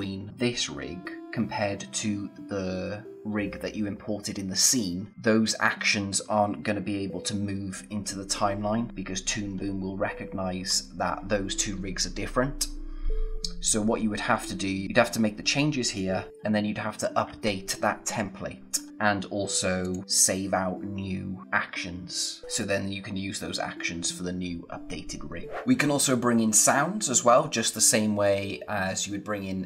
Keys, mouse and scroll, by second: 19.8 click, 25.7 click.